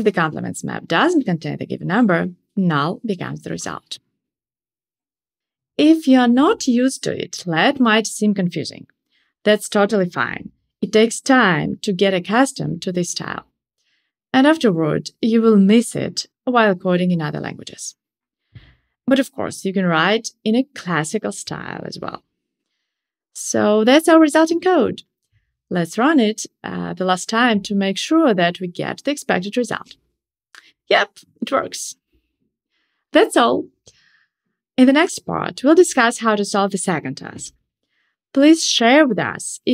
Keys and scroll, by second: 0.1 alt+Up, 0.8 alt+Up, 1.0 super+x, 1.0 super+BackSpace, 2.0 super+v, 25.5 ctrl+shift+r.